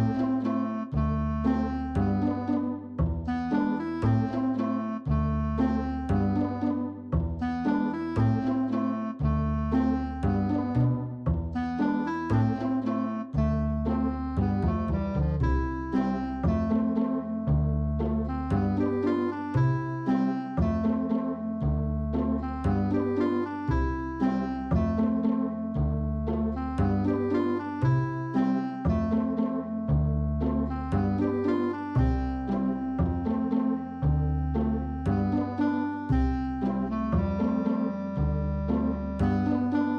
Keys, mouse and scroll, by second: 0.0 click, 0.1 middle click, 0.8 f, 1.0 click, 1.2 click, 1.7 middle click, 2.1 click, 2.2 middle click, 2.4 g, 2.5 click, 2.8 click, 3.1 click, 3.2 middle click, 3.2 click, 3.3 middle click, 3.5 click, 3.9 click, 4.0 shift+middle click, 4.4 shift+middle click, 4.9 middle click, 5.2 middle click, 5.3 click, 5.5 click, 5.7 middle click, 5.8 click, 5.9 middle click, 6.2 middle click, 6.5 scroll up 1, 7.3 f, 7.4 click, 7.7 scroll up 2, 8.0 click, 8.3 middle click, 8.9 middle click, 9.1 click, 9.1 f, 9.2 f, 9.3 click, 9.6 click, 9.9 shift+middle click, 10.1 click, 10.3 middle click, 10.7 click, 10.9 middle click, 10.9 click, 11.1 click, 11.2 scroll down 1, 11.2 click, 11.7 middle click, 12.3 scroll down 1, 12.5 click, 12.8 middle click, 12.9 click, 13.3 middle click, 13.3 click, 13.5 click, 13.5 middle click, 14.0 middle click, 14.3 shift+middle click, 15.0 middle click, 15.8 Tab, 17.6 click, 18.1 shift+middle drag, 18.4 middle click, 18.8 shift+middle click, 20.1 middle click, 22.7 shift+a, 28.9-33.3 drag, 35.4 click, 35.7 click.